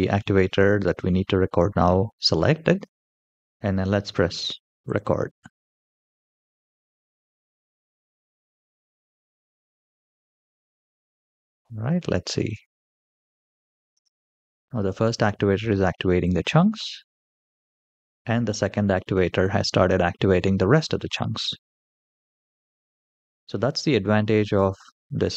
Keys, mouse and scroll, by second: 4.6-10.2 drag, 10.5-11.3 middle drag, 11.8-12.3 shift+middle drag, 12.5 middle click, 13.7 space.